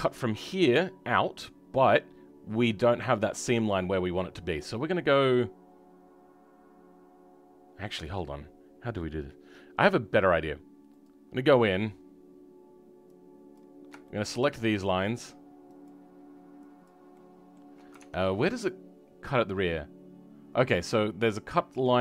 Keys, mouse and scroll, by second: 10.9 click, 14.0 shift+middle click, 14.9 shift+click, 15.8 shift+click, 17.0 shift+middle click.